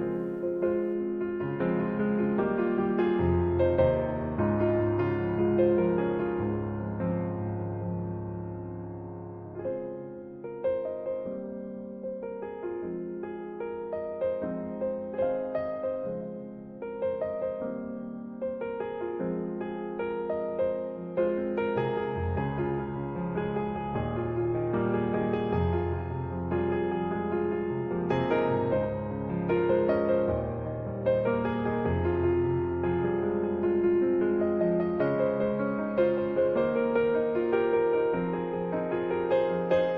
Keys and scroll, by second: 5.0-9.7 typing, 33.4-34.6 typing, 35.7-37.2 typing, 38.4 3.